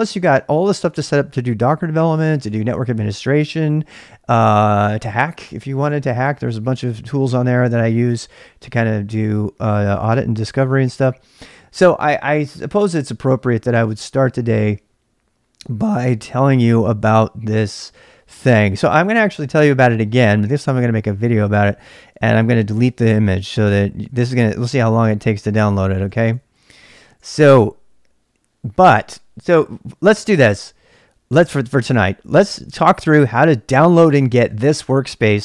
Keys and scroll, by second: 22.5-24.4 typing, 25.5-27.0 typing.